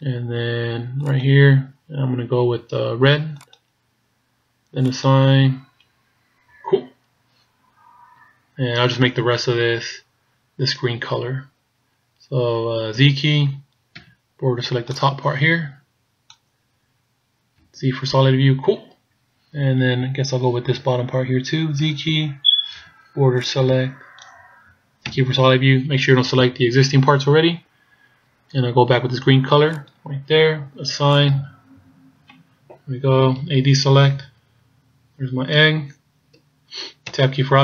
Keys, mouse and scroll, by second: 1.1 click, 5.0 click, 6.5 a, 13.0 z, 14.0 b, 17.6 z, 21.8 z, 22.7 b, 25.2 z, 29.8 click, 31.2 click, 33.5 a, 34.2 scroll down 2, 34.9 scroll down 2, 35.1-35.7 scroll up 4, 37.2 Tab.